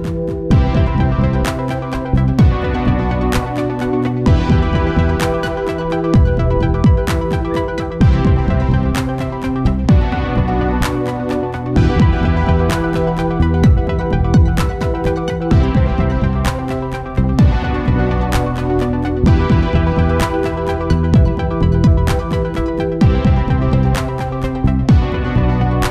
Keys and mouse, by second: 1.2-3.0 right drag, 2.0-3.7 drag, 3.2 ctrl+s, 3.9 Tab, 5.6-7.2 drag, 7.6-9.1 drag, 12.1-14.0 drag, 14.0-17.1 drag, 18.2 KP_0, 19.9 shift+f, 23.2-24.4 middle drag, 24.2 shift+f, 25.3 ctrl+s.